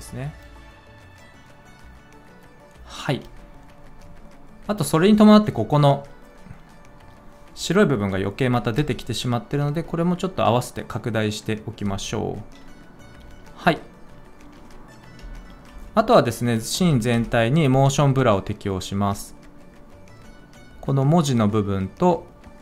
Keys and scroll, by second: 3.1 space, 9.7 s, 15.1 F4, 16.6 F4.